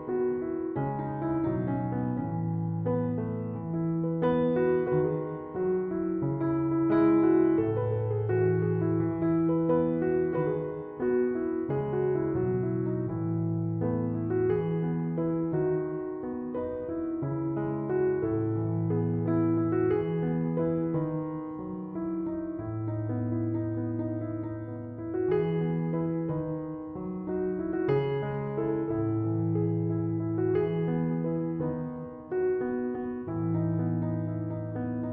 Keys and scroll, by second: 7.9 3, 8.2 Return, 12.6 3, 12.8 Return.